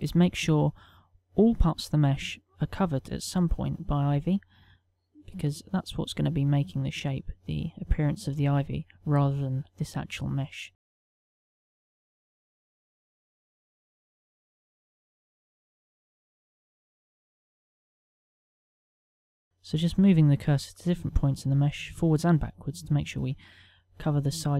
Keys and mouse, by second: 1.7 middle click, 5.2 right click, 5.8 middle click, 11.7 right click, 12.2 click, 12.6 middle click, 14.2 click, 14.4 click, 15.1 middle click, 16.6 right click, 17.4 click, 19.0 middle click, 21.1 right click, 24.0 middle click.